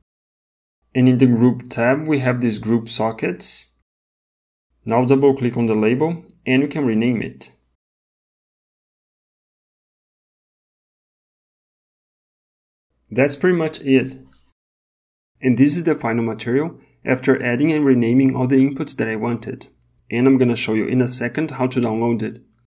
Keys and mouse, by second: 5.2 click, 5.5 click, 6.2 shift+BackSpace, 8.9 shift+click, 15.3 Tab.